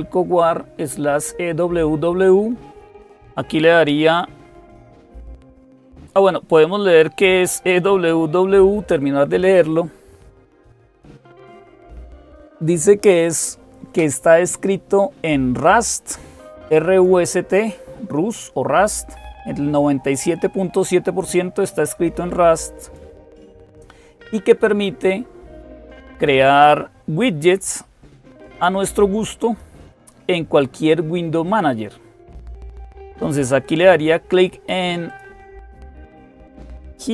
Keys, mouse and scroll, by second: 15.7-17.6 drag, 22.6 click, 27.3-30.1 drag, 34.9 click.